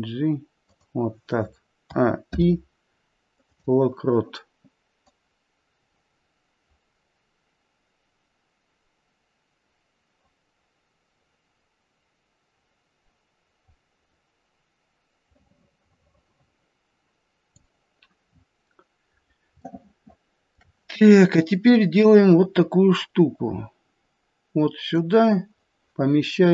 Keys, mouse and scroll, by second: 1.8 a, 2.3 i, 5.1 click, 18.2-19.7 scroll down 6, 19.7 shift+middle click, 21.7 click.